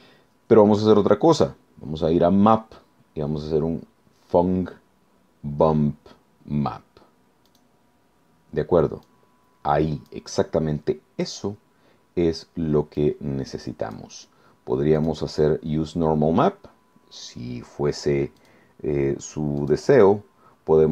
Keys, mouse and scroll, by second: 7.5 click, 9.0-10.3 drag, 13.0-14.2 drag, 15.0 click, 18.4 click, 19.6 click.